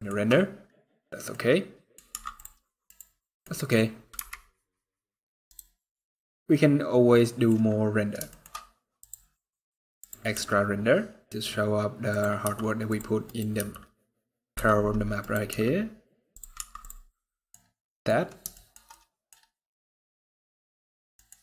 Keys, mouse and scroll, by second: 0.2 scroll up 1, 1.0 middle click, 1.8 Tab, 2.6 click, 3.0 middle click, 3.9 KP_Decimal, 4.6 scroll down 7, 5.2 right click, 5.6 middle click, 8.0 shift+middle click, 8.7 click, 10.0 r, 12.2 g, 13.0 right click, 13.4 g, 15.0 right click, 15.3 r, 16.3 Tab, 16.8 middle click, 17.3 scroll down 2, 17.5 middle click, 17.8 scroll down 1, 18.3 shift+middle click, 18.6 middle click, 20.4 scroll up 4, 20.9 middle click.